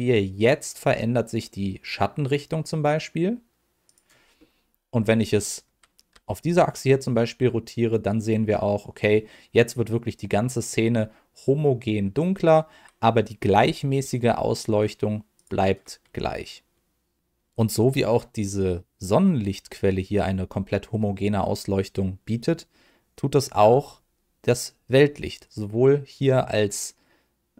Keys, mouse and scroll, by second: 3.8 click, 4.3 middle click, 6.1 r, 10.5 click, 13.5 r, 15.3 click, 18.7 middle click, 25.2-27.5 drag.